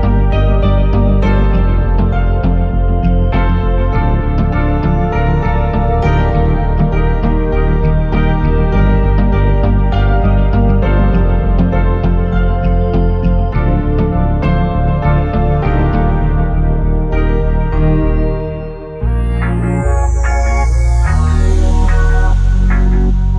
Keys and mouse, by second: 7.9 space, 8.7 click, 9.2 click, 9.4 click, 9.7 middle click, 9.8 shift+click, 10.0 shift+click, 10.1 shift+a, 10.7 s, 11.1 click, 11.3 shift+middle click, 11.6 click, 11.9 click, 12.8 click, 13.2 KP_0, 13.6 shift+middle click, 13.9 click, 14.9 click, 16.3 shift+Left, 16.3-17.4 typing, 18.9 space, 19.7 click, 20.5 click, 20.9 click, 21.4 click, 21.5 space.